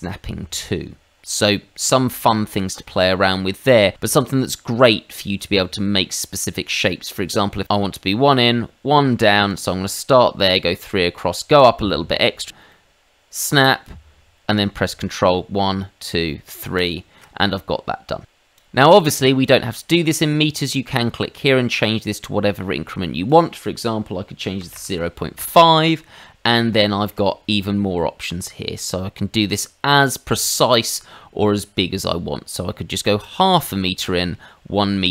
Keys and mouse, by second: 9.5 ctrl+click, 12.7 middle click, 16.7 ctrl+click, 17.4 middle click, 18.5 click, 21.7 click, 22.8 click, 24.6 KP_0, 24.7 KP_Decimal, 24.9 KP_5, 25.3 Return, 26.8 shift+middle click.